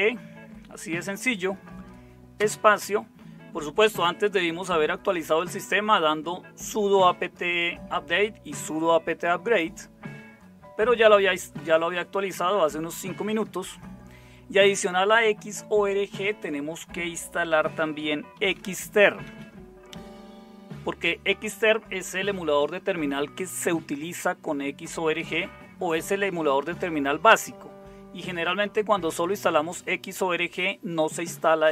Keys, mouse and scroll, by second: 2.3 space, 17.7-19.2 typing.